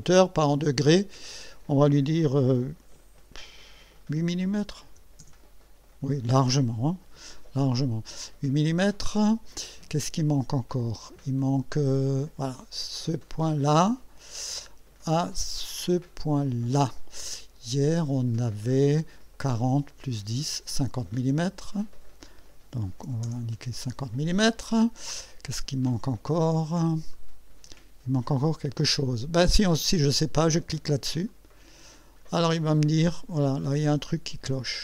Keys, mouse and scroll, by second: 0.0 click, 4.9 8, 5.2 Return, 13.2 click, 16.2 click, 21.7 click, 22.6-23.5 typing, 27.1-28.0 drag, 31.3 click, 32.5-32.8 scroll up 1, 33.1 right click.